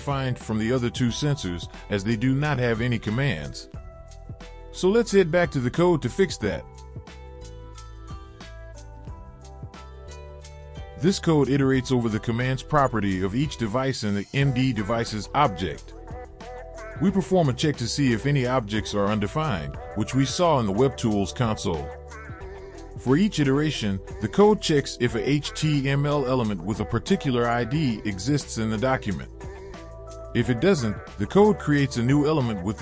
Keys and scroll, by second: 7.7 Return, 10.0 ctrl+v, 17.5 ctrl+v, 18.5 space, 20.2 space.